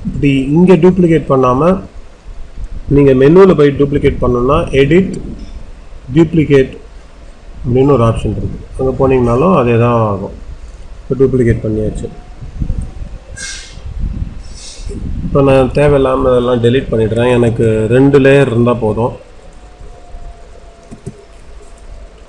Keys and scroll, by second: 17.4 Delete, 20.8 Delete.